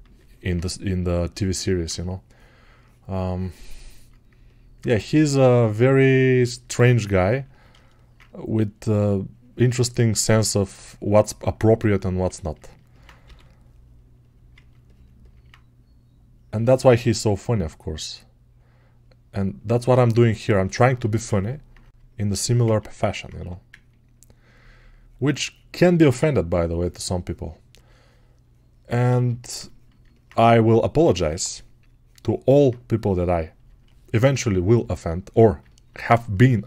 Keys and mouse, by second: 6.5-12.9 alt+drag, 12.9-14.4 drag, 14.4 ctrl+alt+right click, 14.6-16.5 alt+drag, 27.7-29.0 right drag, 29.0-34.6 ctrl+alt+drag, 34.6-36.6 alt+shift+right drag.